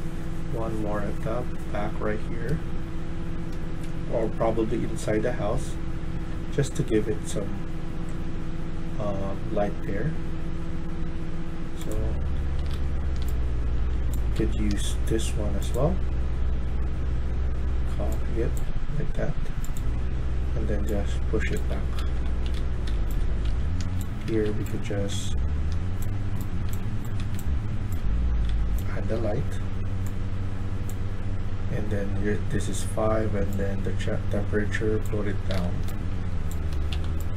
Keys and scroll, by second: 12.2-13.6 typing, 14.6 typing, 21.4-28.4 typing, 35.4 d, 35.8-36.8 s, 36.8 q.